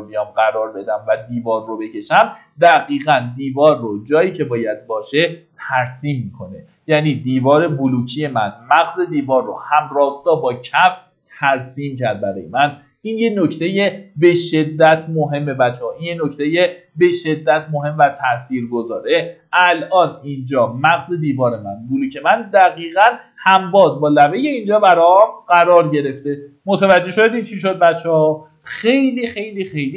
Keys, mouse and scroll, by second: 0.7 middle click, 1.7 click, 2.7 middle click, 3.3 scroll up 1, 4.5 click, 4.9 Escape, 5.2 scroll up 1, 12.4 click, 14.0 scroll up 1, 14.8 shift+middle click, 15.7-17.8 scroll up 1, 17.8 Escape, 23.8 click.